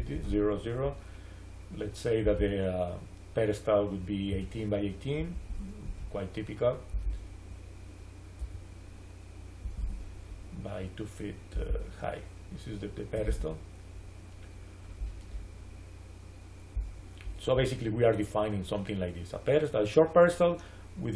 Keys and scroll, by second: 0.1 Return, 4.2 1, 5.0 8, 5.4 Return, 8.3 1, 9.7 Return, 13.0 2, 13.1 Return.